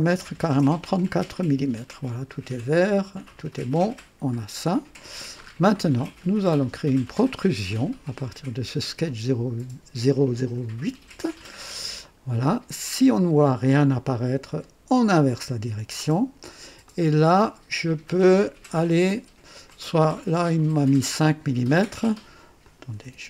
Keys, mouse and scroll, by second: 0.2 KP_4, 0.4 KP_Enter, 3.7 click, 5.3-5.7 scroll up 2, 5.9-6.6 right drag, 11.9 click, 15.2 click, 16.8-18.9 drag, 19.0 right click, 19.6-21.6 drag, 22.5 click, 23.0 &.